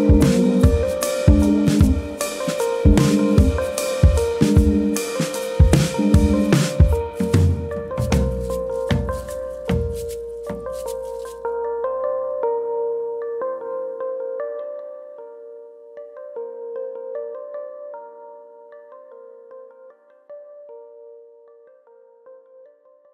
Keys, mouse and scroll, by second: 1.5 click, 2.2 ctrl+click, 3.2 click, 6.2 alt+click, 7.0 click, 8.4 click, 8.7 alt+click, 9.8 shift+middle click, 12.8 click, 15.8 shift+click, 16.3 shift+click, 17.2 click, 20.6 middle click, 21.5 ctrl+KP_Add, 22.6 i.